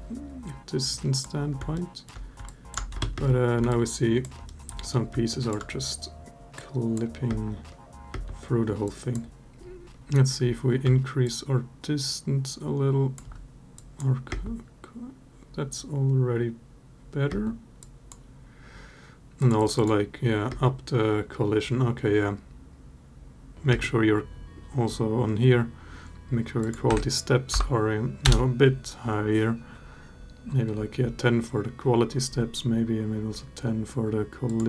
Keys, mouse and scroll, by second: 0.7-1.0 drag, 1.5-1.8 alt+middle drag, 2.2 alt+drag, 2.7 space, 2.9 space, 3.5-4.0 alt+drag, 4.2 alt+middle drag, 5.0 alt+drag, 6.3-6.8 drag, 7.0 space, 7.9 space, 8.7 drag, 11.0-13.0 shift+drag, 13.6 drag, 14.1 space, 17.1 space, 17.6-17.9 drag, 19.2 click, 19.4 click, 19.5 click, 20.3 space, 23.5 space, 26.4-28.1 drag, 34.2-34.6 drag.